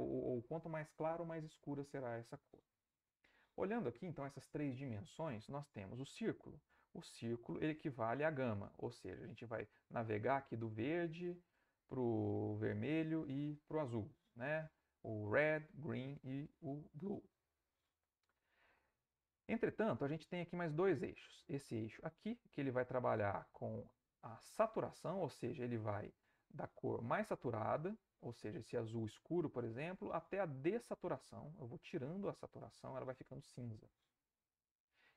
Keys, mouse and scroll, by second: 6.6-19.8 drag, 19.8-20.3 scroll up 1, 20.3-26.4 drag, 27.0-28.2 drag, 28.2 scroll up 1, 28.5-35.1 drag.